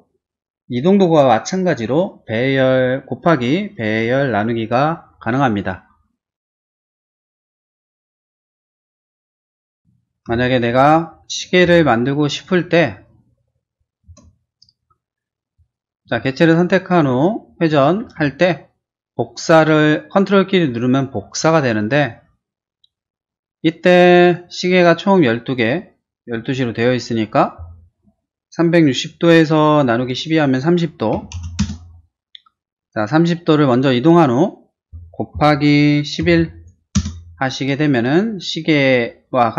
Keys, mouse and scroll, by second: 6.5 scroll down 1, 6.8-10.3 typing, 7.3 click, 7.9 click, 8.3 click, 8.9 click, 9.3 click, 9.6 click, 10.5 click, 12.4 ctrl+click, 13.2 middle click, 13.8 middle click, 14.0 space, 15.5 click, 16.1 q, 16.8 click, 17.7 click, 24.2 click, 30.9-31.9 typing, 35.4-36.4 typing, 37.0 Return.